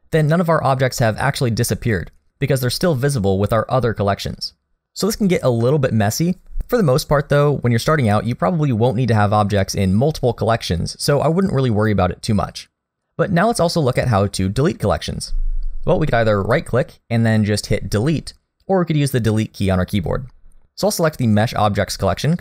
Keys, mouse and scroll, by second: 16.5 right click, 20.6 click.